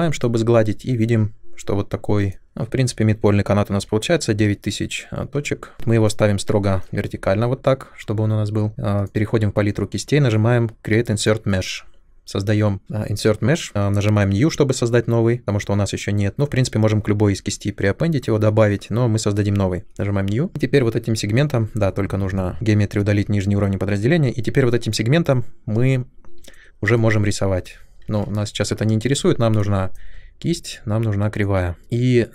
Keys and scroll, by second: 28.0 ctrl+z.